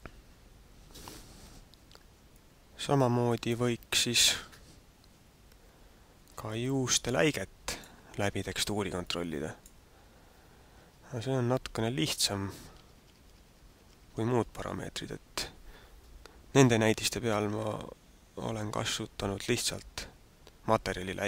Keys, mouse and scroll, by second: 2.5 middle click, 6.3 middle click, 8.9 click, 10.8 alt+Tab, 12.5 alt+Tab, 12.8 alt+Tab, 13.0 alt+Tab, 13.2 alt+Tab, 13.4 alt+Tab, 13.6 alt+Tab, 13.8 alt+Tab, 14.0 alt+Tab.